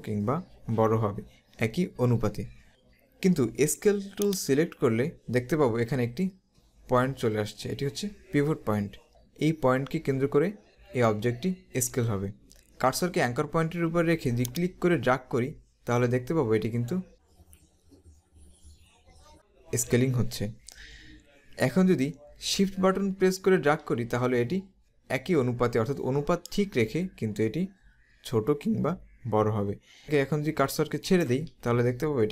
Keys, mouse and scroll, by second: 4.3 click, 14.5 click.